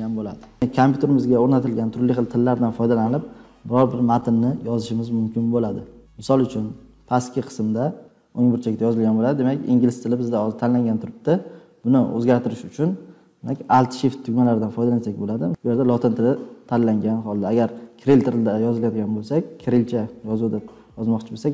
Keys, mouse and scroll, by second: 15.5 typing, 17.7 Return.